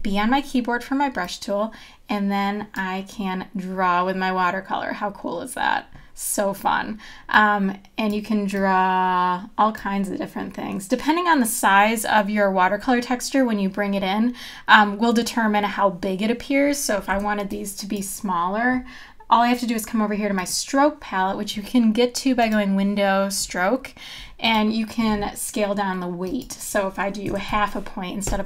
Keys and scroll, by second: 17.1 v, 27.3 KP_Decimal, 27.5 KP_5, 28.2 Return.